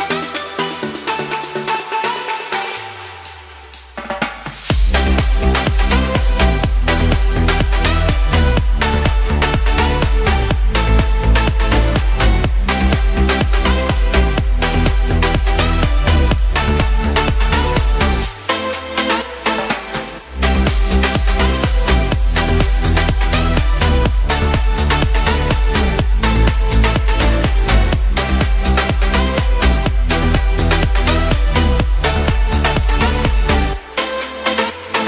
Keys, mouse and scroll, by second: 1.6 g, 1.7 z, 12.2 s, 16.4 ctrl+z, 16.6 ctrl+z, 21.5 s, 26.5 s.